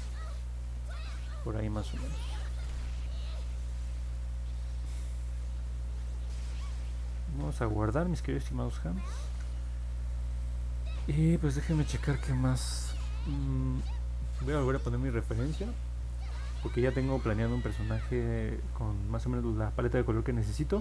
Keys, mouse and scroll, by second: 0.3 click, 1.0 click, 1.4 click, 2.9 scroll down 1, 3.5 scroll up 1, 4.9-6.3 alt+middle drag, 9.1 ctrl+s.